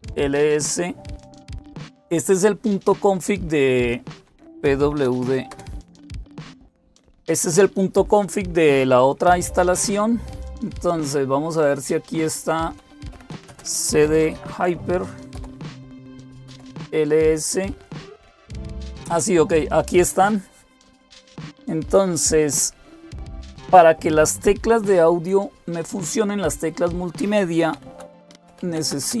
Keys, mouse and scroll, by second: 4.1-5.4 typing, 12.7-16.7 typing, 27.5-29.2 typing.